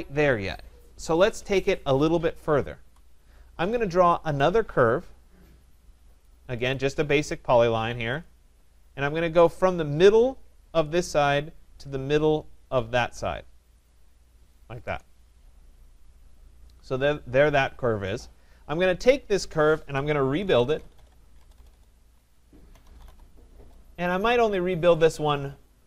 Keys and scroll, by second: 2.8 Delete, 14.8 Return, 21.4 BackSpace, 23.5 Return.